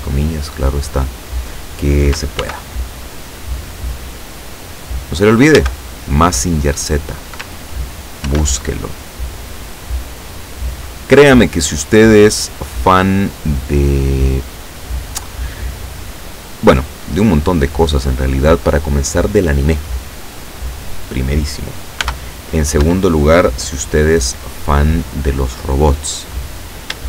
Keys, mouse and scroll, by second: 2.4 ctrl+r, 3.0 ctrl+click, 4.6 click, 5.6 a, 8.3 ctrl+r, 9.1 click, 9.9 click, 11.0 right click, 11.8-12.8 drag, 12.8 middle click, 13.2-14.6 drag, 14.6 middle click, 15.2 right click, 15.6 middle click, 15.8 click, 16.7 middle click, 17.2-18.4 drag, 22.1 b, 22.9 Escape, 25.2 click, 26.4 right click.